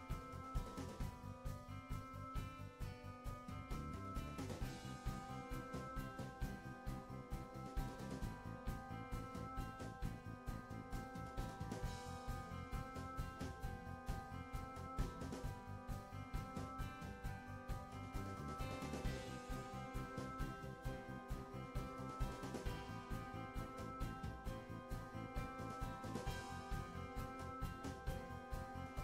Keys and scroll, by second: 3.0 Right, 7.0 Right, 9.7 Down, 9.9 Left, 15.1 Right, 18.2 Right.